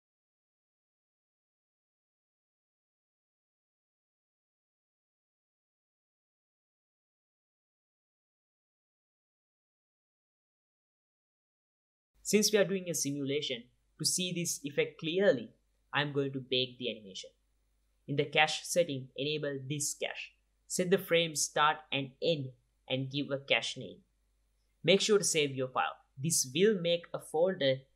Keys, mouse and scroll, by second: 1.2 space, 1.3-1.7 middle drag, 1.7 click, 2.4 middle click, 2.5 click, 3.0-3.4 middle drag, 3.5 click, 4.3 click, 5.7 click, 5.9 middle click, 6.7 click, 7.0 middle click, 7.1 click, 8.1 click, 9.4 click, 9.6 middle click, 9.8 click, 10.0 r, 10.4 middle click, 10.5 click, 11.2 click, 13.2 space, 13.5 drag, 17.4-19.0 middle drag, 19.4 click, 22.4-23.4 drag, 24.3-26.6 drag, 27.2 click.